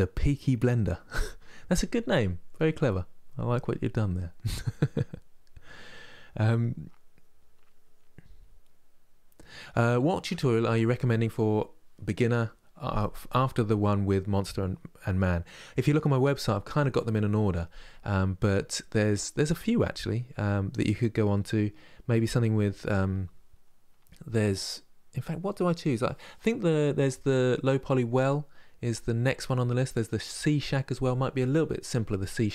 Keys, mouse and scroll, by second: 6.0-9.1 middle drag, 21.0-24.1 middle drag, 32.4 middle click.